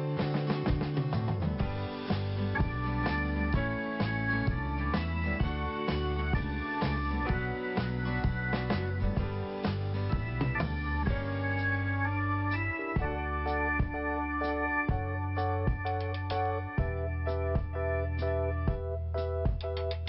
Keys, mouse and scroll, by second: 0.5 click, 0.6 click, 7.0 click, 9.6 i, 10.4 scroll up 1, 12.2 click, 15.8 click, 18.9 click, 18.9 click, 19.5 click.